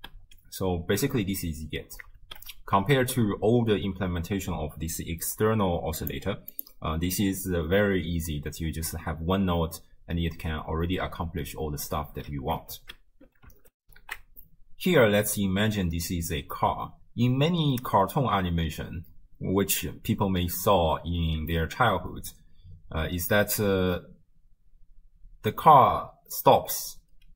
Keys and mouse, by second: 0.0 shift+space, 1.7 space, 2.2 shift+space, 6.0 click, 6.5 click, 10.0 space, 12.1 space, 12.8 shift+space, 13.8 ctrl+alt+shift+w, 14.1 ctrl+alt+shift+q, 25.8 space, 26.9 space.